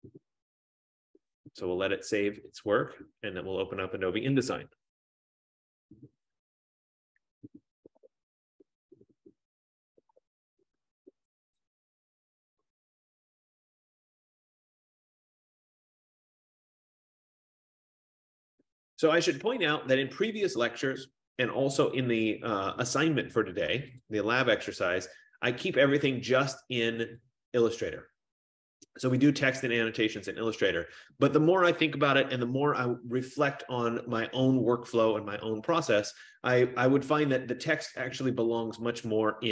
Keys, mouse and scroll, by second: 2.9 click, 22.2-24.6 drag, 27.6 click, 36.1 click, 38.8 click.